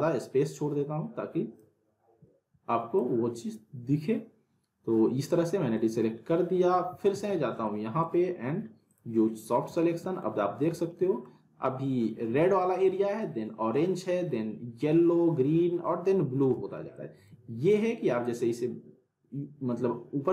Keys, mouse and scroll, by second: 6.7 alt+Num_Lock, 6.7 click, 6.9 alt+w, 7.0 alt+right click, 7.1 alt+w, 7.6-8.3 alt+middle click, 8.9 click, 9.7-10.3 alt+middle click, 10.4-10.8 scroll up 2, 10.8-11.4 alt+middle drag, 16.5 z, 16.9-17.6 middle drag, 18.2-20.3 drag.